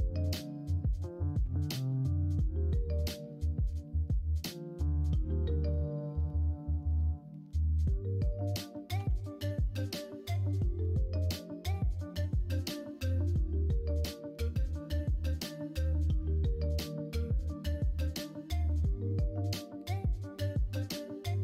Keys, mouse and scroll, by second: 11.2 r.